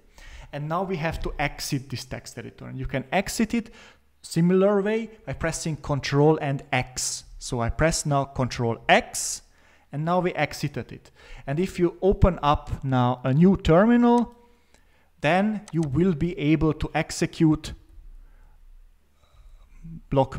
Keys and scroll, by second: 8.8 ctrl+x, 17.4-20.0 typing.